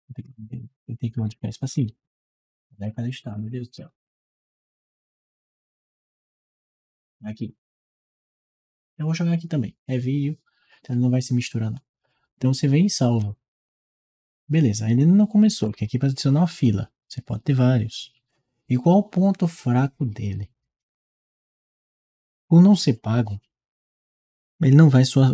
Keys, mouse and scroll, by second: 2.6 scroll up 2, 3.2-5.5 scroll down 6, 6.0 middle click, 7.2 click, 7.5 click, 13.0 click.